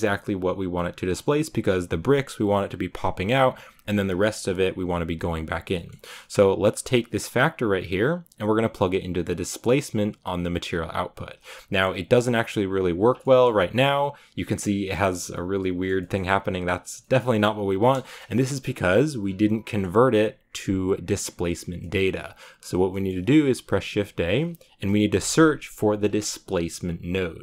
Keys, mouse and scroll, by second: 0.9-1.2 scroll up 3, 3.5-4.0 scroll down 2, 9.9-11.3 drag, 13.2-16.7 shift+middle drag, 16.7 scroll down 3, 16.9 middle click, 17.8 KP_0, 19.0 middle click, 19.5 scroll up 4, 19.6-27.4 middle drag.